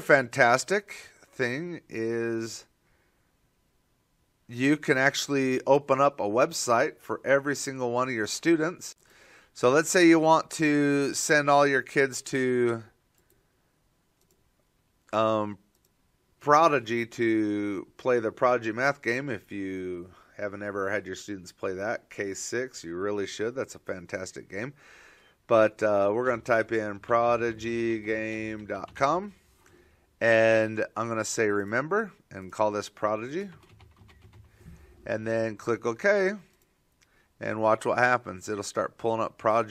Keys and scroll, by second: 26.3-32.1 typing, 33.8-38.6 typing.